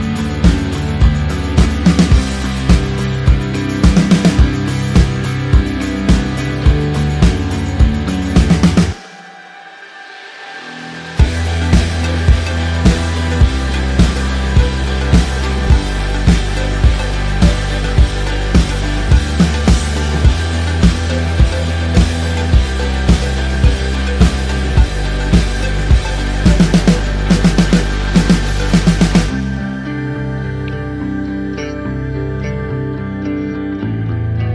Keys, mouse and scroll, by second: 0.5 -, 1.3 t, 2.1 click, 6.2 click, 8.3 click, 9.7 click, 11.5 \, 12.2 Return, 13.8 v, 14.2 click, 15.3-16.1 scroll down 1, 16.1 click, 16.5 click, 19.2-20.3 scroll up 1, 20.3 click, 22.0-23.1 typing, 23.1 KP_Enter, 24.6 ctrl+click, 25.3 click, 26.4 ctrl+t, 27.1 alt+click, 28.6 Return, 29.1 click, 30.7 shift+click, 33.2 Up, 33.7 Left, 34.4 Down.